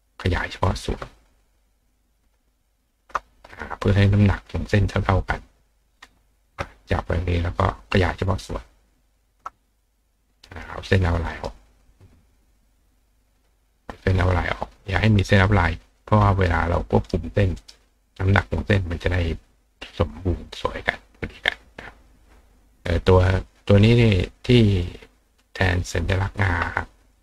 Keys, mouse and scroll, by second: 0.6 click, 2.0 shift+click, 3.5 click, 6.3 ctrl+shift+click, 7.6 click, 8.6 shift+click, 11.3 right click, 12.0 click, 12.6 click, 15.2 right click, 15.9 click, 16.7 click, 17.0 right click, 17.5 right click, 21.7 click, 23.3 click, 25.8 click.